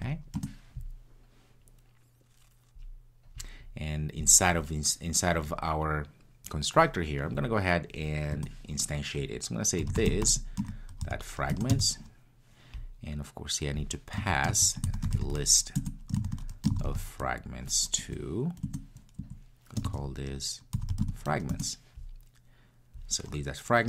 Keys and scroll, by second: 11.6 Return, 15.8 Return.